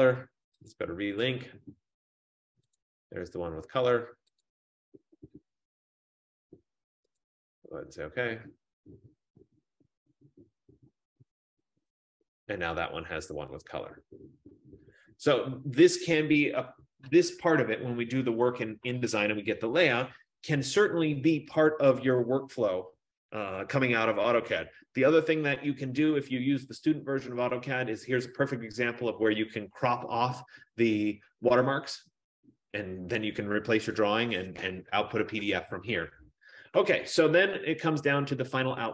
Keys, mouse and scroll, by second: 0.8 click, 2.8 click, 4.5 click, 7.3 click, 24.8 F15.